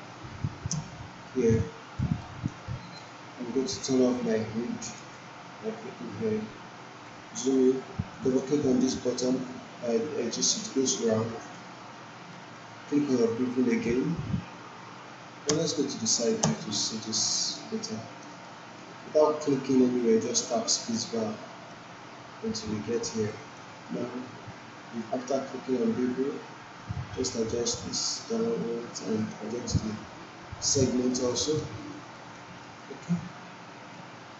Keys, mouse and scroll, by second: 1.6-2.2 alt+click, 2.2 alt+right click, 2.6 alt+middle click, 7.1-7.7 alt+right click, 8.2 click, 11.3 click, 11.6 alt+middle click, 12.4 alt+right click, 13.7 click, 15.5 space, 17.2-17.8 alt+middle click, 17.8-19.0 alt+right click, 18.4-21.5 alt+middle drag, 22.6 alt+middle click, 23.2 alt+right click, 25.0-27.8 drag, 28.0-30.9 drag, 30.9 alt+middle click, 31.3 alt+right click, 31.7 alt+middle click, 32.1 alt+right click, 32.6 alt+middle click, 34.2-34.3 drag.